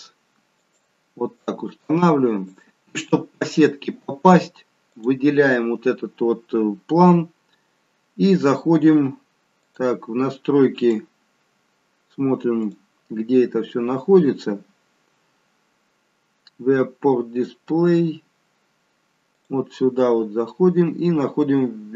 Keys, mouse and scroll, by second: 1.4 click, 4.8 click, 9.6 click, 10.8 click, 12.5 click, 13.4-14.0 scroll down 3, 14.0-14.5 scroll down 2, 14.5-15.6 scroll up 3, 16.5-17.5 scroll down 1, 17.5 scroll down 2, 19.3 click.